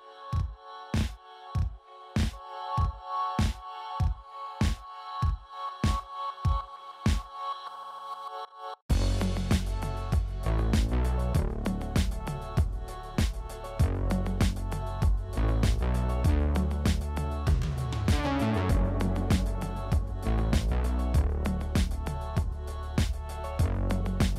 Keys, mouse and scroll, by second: 0.6 click, 1.7 click, 2.3 KP_0, 2.4 KP_Enter, 3.5 click, 4.7 click, 5.5 KP_0, 5.7 KP_Enter, 7.3 click, 7.6 KP_0, 8.7-10.9 shift+middle drag, 10.9 scroll up 1, 11.6 ctrl+alt+KP_0, 12.5 shift+a, 15.0 ctrl+alt+KP_0, 15.9 n, 16.5 click, 16.8 click, 17.0 click, 17.6 click, 18.9 scroll down 1, 19.6-21.0 shift+middle drag, 21.0-21.6 scroll up 1, 21.6-23.2 shift+middle drag.